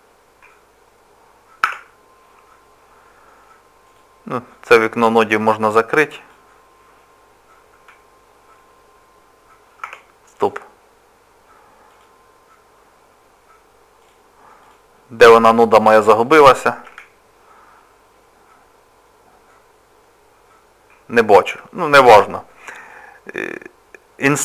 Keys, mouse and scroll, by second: 0.4 scroll down 1, 1.7 Tab, 1.7-2.3 scroll down 3, 3.0 scroll up 1, 3.9 click, 3.9-5.0 scroll up 2, 7.7 KP_Decimal, 10.0 Tab, 10.4 click, 11.9 click, 16.8 KP_Decimal, 18.7 scroll up 2, 18.8-19.2 scroll down 1, 19.3 scroll up 1, 20.8 scroll down 1, 22.9 click, 22.9 scroll down 3.